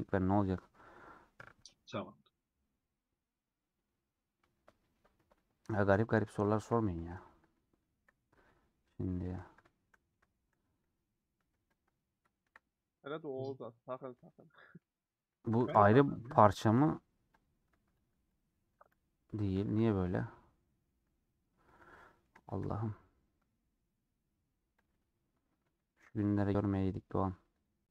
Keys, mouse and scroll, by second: 5.3-5.6 scroll down 1, 5.6-7.0 shift+middle drag, 7.0 2, 7.1 alt+click, 7.8 KP_Decimal, 8.5 middle click, 8.9 scroll up 1, 9.0-11.0 middle drag, 11.0-11.8 scroll up 1, 11.8 alt+click, 12.3 KP_Decimal, 12.9-13.3 scroll down 2, 13.3-15.6 middle drag, 15.6 a, 17.5 p, 17.8 click, 18.8 g, 19.9-21.0 middle drag, 21.0 alt+z, 21.2 middle click, 21.8 3, 21.9 middle click, 22.6-23.2 scroll up 2, 22.7 middle click, 23.3 scroll down 1, 23.4 middle click, 24.0-24.6 scroll up 4, 24.9 click, 26.1 click, 26.6 shift+click, 27.8 shift+click.